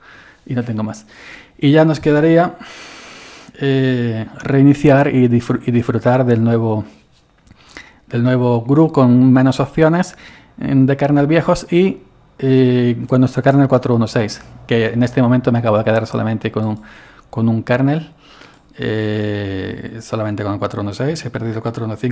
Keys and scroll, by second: 20.9-22.1 typing.